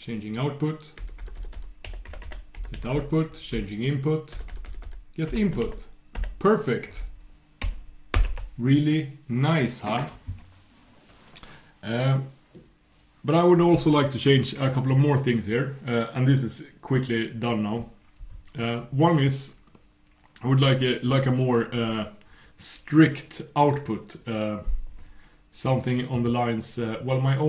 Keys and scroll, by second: 1.0 super+', 1.8 super+\.